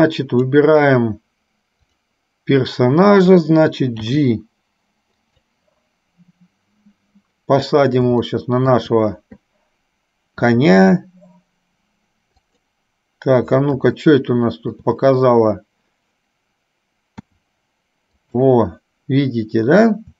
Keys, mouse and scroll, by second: 1.9 click, 4.2 g, 8.4 shift+middle click, 10.6 r, 14.2 shift+middle click, 17.3 r.